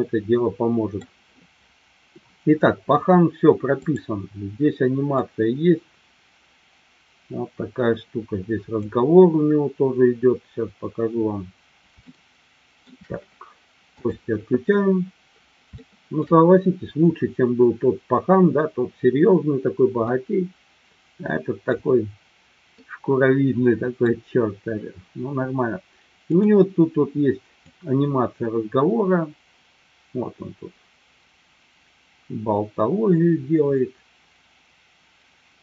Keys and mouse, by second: 4.6-5.4 drag, 6.1-10.1 drag, 12.1 shift+middle click, 14.0 click, 15.7-16.3 shift+middle drag, 20.2-21.7 middle drag, 22.8-24.1 middle drag, 26.9 click, 28.4-35.6 drag.